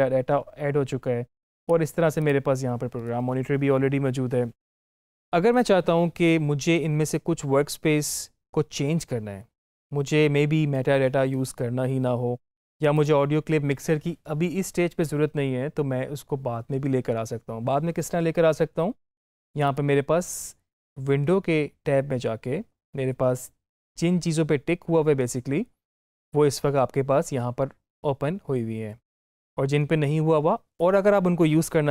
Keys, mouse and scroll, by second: 1.5 click, 12.8 click, 19.5 click.